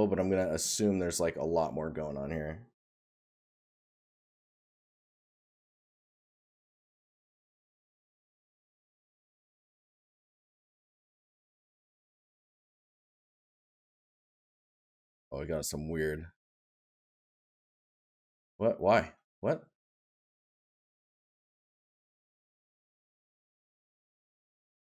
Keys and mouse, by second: 3.9 right click, 5.7 right click, 9.2 right click, 13.7 right click.